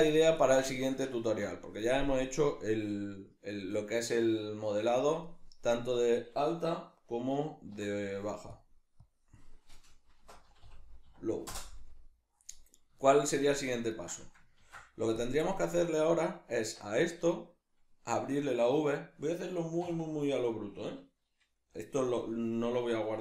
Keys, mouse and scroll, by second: 7.8 F2, 14.6 ctrl+s.